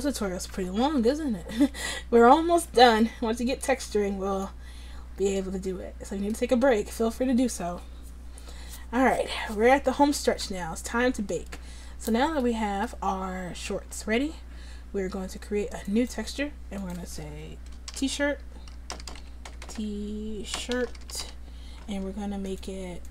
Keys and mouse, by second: 13.8 Tab, 15.9-19.6 drag, 19.6 BackSpace, 19.8 BackSpace.